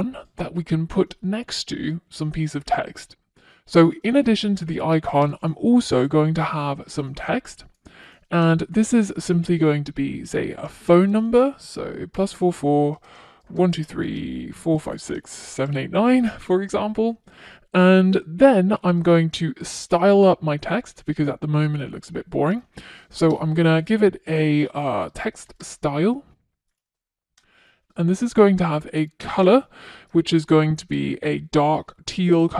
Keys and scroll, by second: 6.8 Return, 17.2 super+s, 21.5 Return, 27.4 Return.